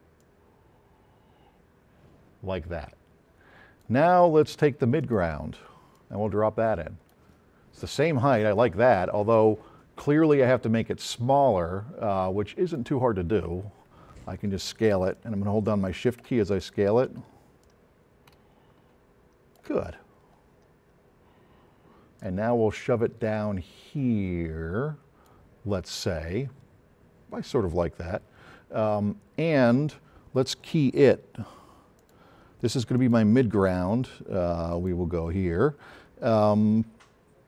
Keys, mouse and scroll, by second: 2.2-3.7 drag, 5.0 click, 6.0-7.2 drag, 8.4-12.9 drag, 13.3 middle click, 13.5 click, 15.2-16.4 shift+drag, 16.6 click, 17.6 click, 20.1 middle click, 20.6 middle click, 21.4 scroll down 2, 22.2-23.7 drag, 32.0 click, 33.0 click, 34.8 click.